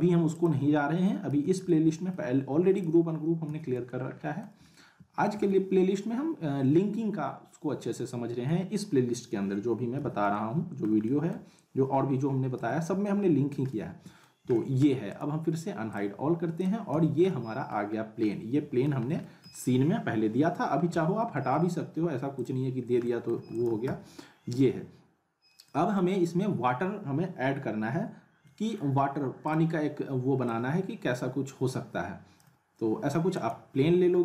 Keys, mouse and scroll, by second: 1.3 z, 1.6-2.3 alt+middle click, 2.3-2.8 scroll down 1, 2.8 click, 3.4 z, 3.8-4.5 alt+middle drag, 10.0 z, 10.3-10.9 alt+middle click, 12.5 z, 13.0-13.6 alt+middle click, 14.2 scroll down 1, 14.5 alt+middle click, 15.1 right click, 16.9 z, 17.3-17.9 alt+middle click, 17.9 scroll up 1, 18.3-18.9 alt+middle click, 19.0 scroll down 1, 19.2 alt+middle click, 20.9 z, 21.3 alt+middle click, 22.4 click, 22.7 scroll down 1, 23.0 alt+middle click, 23.3 alt+w, 23.8 z, 24.3 scroll down 1, 25.6 middle click, 26.5 scroll up 1, 28.4 middle click, 29.4 click, 29.8-30.1 scroll down 1, 30.4-32.6 drag, 33.3 right click, 33.8 w.